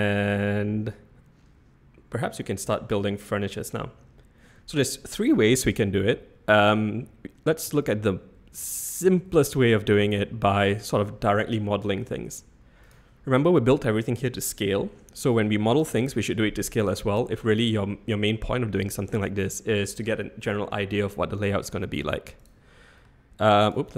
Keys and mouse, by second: 7.8 shift+`, 15.9 n.